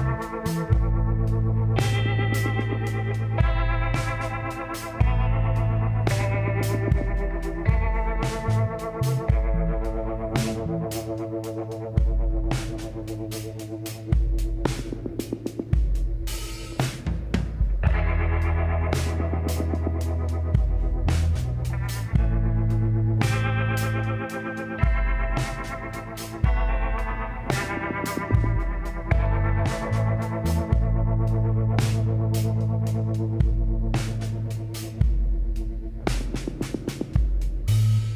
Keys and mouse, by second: 2.6 KP_1, 5.0 Tab, 7.6-9.4 drag, 9.4 middle click, 9.8-13.0 middle drag, 13.0-15.6 drag, 15.8-17.6 drag, 20.2-22.1 drag, 22.1-23.5 middle drag, 25.5 click, 26.3 middle click, 26.9-28.9 drag, 32.2 KP_1, 35.6-36.9 drag.